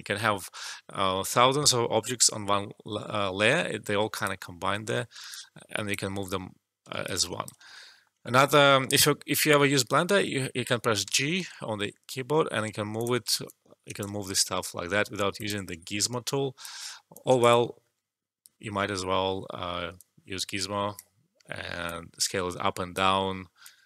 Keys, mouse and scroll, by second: 4.0 alt+click, 5.2-7.6 alt+drag, 7.6 alt+middle click, 11.0 g, 12.9 click, 13.4 alt+click, 14.5 g, 15.3 click, 15.9 alt+click, 16.8 alt+middle click, 17.1 alt+click, 17.6 alt+middle click, 19.9-21.8 drag, 22.1-23.0 drag.